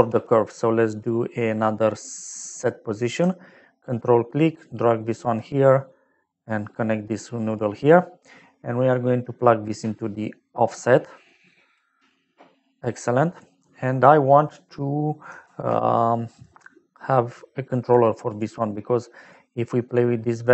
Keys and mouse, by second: 0.1 shift+a, 0.9 click, 2.6 click, 3.9 ctrl+click, 6.0 click, 7.0 click, 8.0 middle click, 10.2 click, 12.5 middle click, 15.4 shift+a, 17.8 click, 18.2 click, 19.3 click.